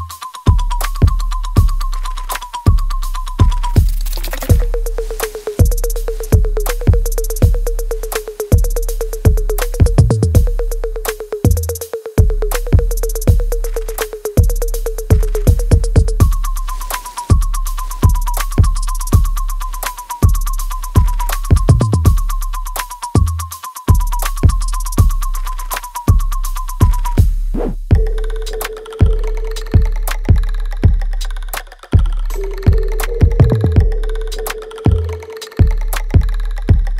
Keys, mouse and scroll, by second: 0.1 ctrl+click, 1.3-4.4 alt+drag, 9.1 alt+right click, 10.0-11.6 ctrl+drag, 11.6-16.7 alt+drag, 16.7-18.7 alt+right drag, 18.7 click, 23.2 click, 24.0-26.4 alt+drag, 28.0-34.8 ctrl+drag, 34.8-36.9 ctrl+drag.